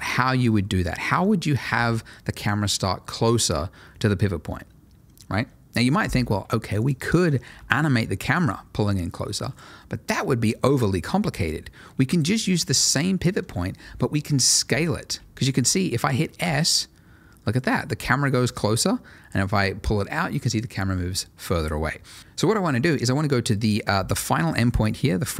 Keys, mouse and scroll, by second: 0.5-1.0 scroll, 1.0 middle click, 6.8 click, 7.0 double click, 7.4 g, 9.4 right click, 10.9-12.0 scroll up 1, 12.0 click, 14.9-16.4 scroll down 1, 16.4 s, 22.1 right click, 24.5 click.